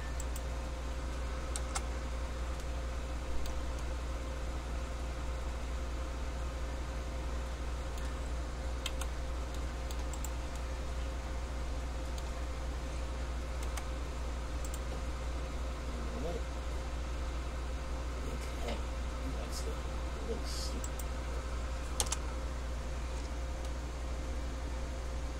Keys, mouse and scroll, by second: 2.8 middle click, 9.1 c, 10.4 right click, 10.8 middle click, 13.9 k, 23.3-23.8 scroll up 1, 23.8 middle click.